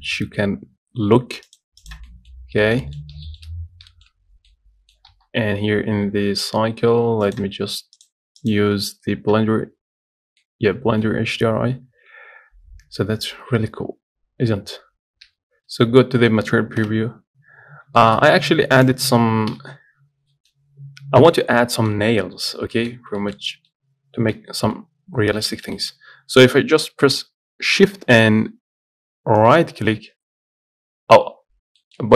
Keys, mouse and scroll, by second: 1.9 click, 2.3-5.5 middle drag, 2.6-2.9 scroll up 1, 4.5 scroll down 2, 7.5-10.9 drag, 10.9-16.2 shift+middle drag, 16.2 z, 17.6-18.2 scroll up 1, 18.2 shift+middle click, 18.5 Tab, 19.8 KP_Decimal, 20.3 scroll down 3, 20.6-23.2 middle drag, 20.8-21.2 scroll up 3, 21.2-22.0 scroll down 2, 22.4-23.0 scroll up 4, 23.4 shift+middle click, 23.6 scroll down 1, 23.7 middle click, 24.1 scroll down 1, 24.9-25.4 scroll down 10, 25.4 scroll up 2, 25.7-29.6 shift+middle drag, 29.6-32.0 shift+right drag, 32.0 shift+middle click.